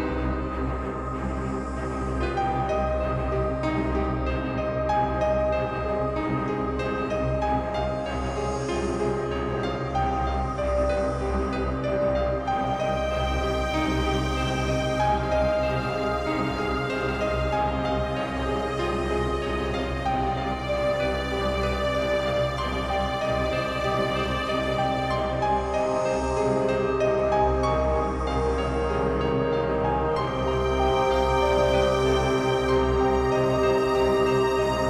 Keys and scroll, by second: 1.5 t, 2.4 space, 4.7 space, 7.8 space, 11.0-11.9 typing, 12.1 Return, 21.3-24.4 typing, 29.2 space, 33.5 ctrl+t.